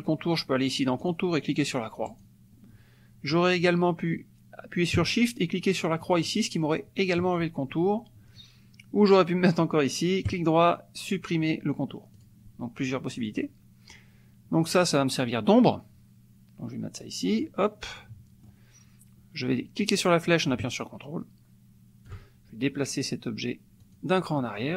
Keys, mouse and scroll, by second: 1.0 click, 2.1 click, 6.1 shift+click, 10.2 right click, 12.2 click, 13.2 click, 14.8-17.6 drag, 17.8 middle click, 19.9-22.3 drag, 23.8 click.